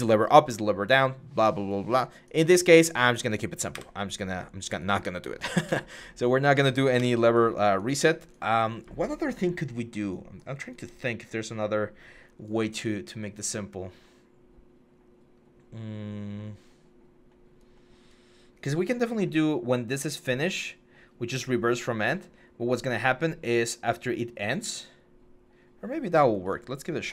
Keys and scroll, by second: 3.5 Delete, 6.8 Delete.